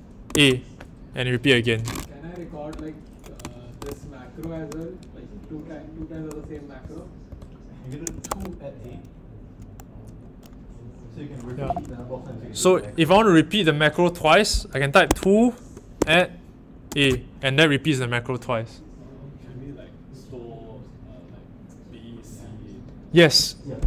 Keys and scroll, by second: 0.3 a, 3.8 BackSpace, 5.9-8.7 typing, 11.4-12.3 typing, 15.0 2, 15.9 shift+2, 16.8 a.